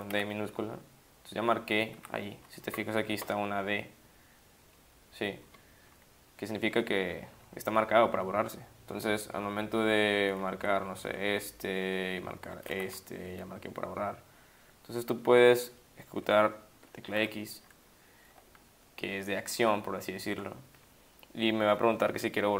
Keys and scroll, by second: 0.1 d, 2.0 Up, 7.0 Down, 7.1 Down, 10.6 Up, 10.8 Down, 10.9 Down, 11.1 Down, 11.2-11.9 Down, 12.7 d, 17.2 x.